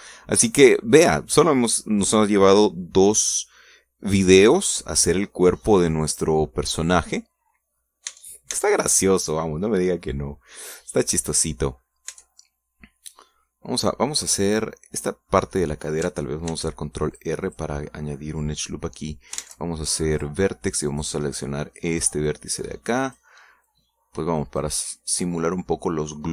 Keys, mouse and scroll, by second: 0.2 alt+Tab, 0.6 scroll down 2, 0.9 click, 1.9 scroll up 2, 7.3-8.4 drag, 8.9 scroll up 2, 9.2 Tab, 10.2 scroll down 2, 10.5-12.8 middle drag, 12.9 scroll up 2, 13.2 Tab, 13.5-15.0 middle drag, 15.6-16.6 middle drag, 16.7 middle click, 17.6 ctrl+r, 18.2 ctrl+click, 18.6 click, 19.0 middle click, 19.7 scroll up 1, 20.5 ctrl+Tab, 21.3 click, 22.0 right click, 22.4 middle click, 23.4-24.5 drag, 24.7-25.9 drag.